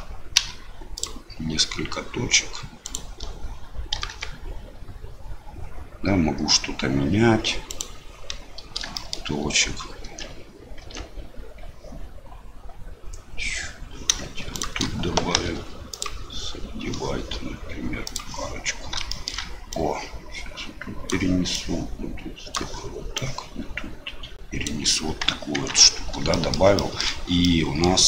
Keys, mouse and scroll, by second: 0.3 w, 2.8 click, 3.9 g, 8.9 shift+middle click, 10.0 Tab, 10.8 Tab, 14.5 shift+click, 15.3 w, 18.1 click, 19.1 shift+middle click, 19.7-21.1 drag, 21.5-22.6 drag, 23.1-24.6 right drag, 25.5 Tab, 26.3 shift+middle click, 26.7 shift+middle click, 27.4 middle click.